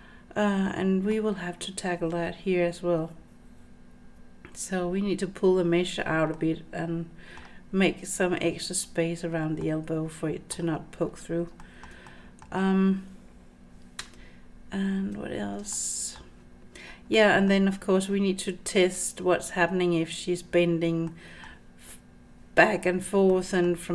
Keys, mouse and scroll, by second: 6.3-9.4 middle drag, 9.6-10.6 middle drag, 11.1-11.5 scroll down 3, 11.6 shift+middle click, 12.1 middle click, 14.0 Tab, 15.7-16.2 shift+middle drag, 17.1 middle click, 21.1-21.4 middle drag, 23.3-23.6 middle drag.